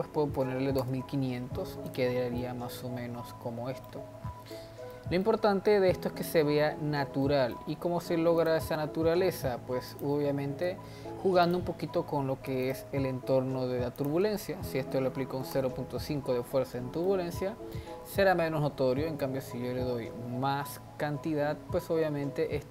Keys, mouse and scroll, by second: 0.6 0, 1.8 click, 2.4-4.2 middle drag, 4.2-4.6 scroll down 1, 4.6-6.4 middle drag, 6.4 scroll up 1, 6.7 scroll down 1, 7.2-8.5 middle drag, 8.5 click, 8.7 g, 10.2 ctrl+z, 10.6 g, 12.7 click, 14.0-17.1 drag, 17.1-19.3 middle drag, 19.3-22.3 drag.